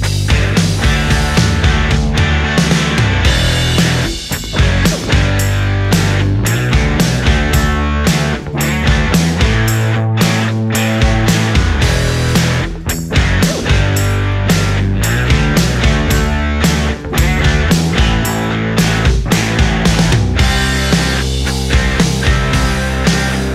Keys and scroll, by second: 0.9 ctrl+z, 10.6 space, 11.2 ctrl+z, 12.0 ctrl+z, 13.4 space, 14.6 ctrl+z, 20.3 ctrl+z, 23.4 ctrl+z.